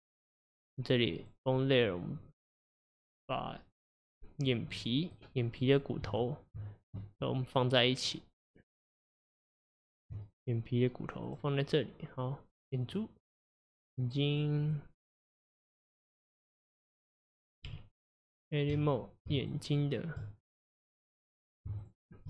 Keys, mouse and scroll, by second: 1.2 click, 4.8 middle click, 5.5 click, 6.2 click, 7.3 click, 8.1 click, 9.3 click, 11.3-13.0 drag, 13.9 click, 14.3 click, 14.7 click, 16.6 click, 17.8 Tab, 19.5 shift+click, 21.9-22.2 shift+drag.